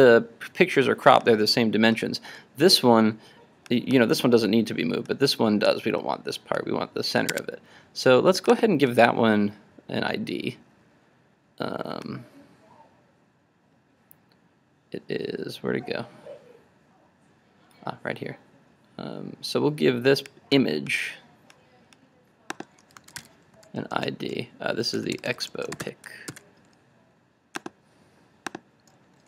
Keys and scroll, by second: 7.3 super+Tab, 26.5 super+s.